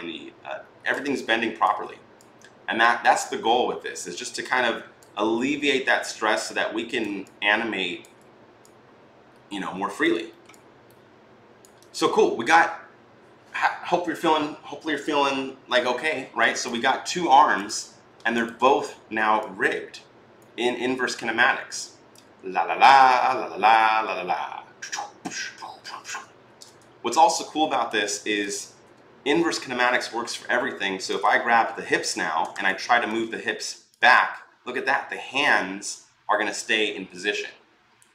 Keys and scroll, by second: 26.2 ctrl+z.